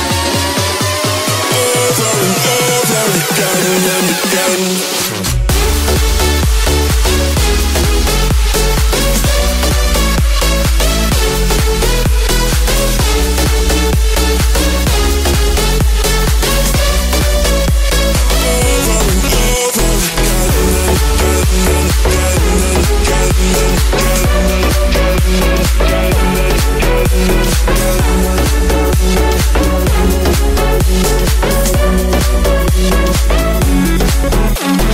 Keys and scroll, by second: 31.8 [, 34.3 [.